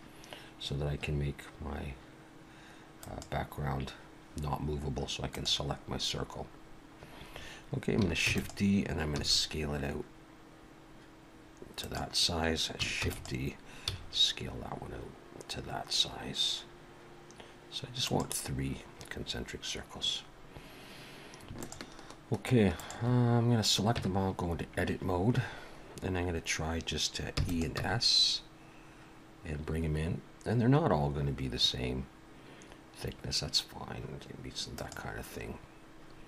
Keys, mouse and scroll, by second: 3.0 click, 5.3 click, 6.7-7.3 scroll down 2, 8.3 shift+d, 9.1 s, 13.0 shift+d, 13.9 s, 18.9-19.2 scroll up 1, 21.6 shift+click, 22.7 shift+click, 24.0 Tab, 27.4 e, 27.7 s.